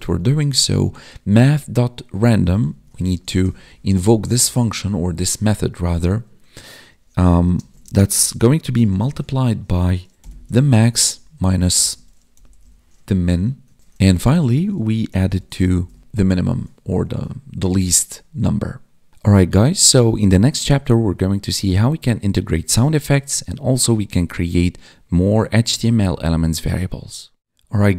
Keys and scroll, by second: 0.0 Right, 0.6 ctrl+Right, 4.3 Right, 7.4 space, 7.8 space, 14.1 space, 14.3 space, 16.0 Escape.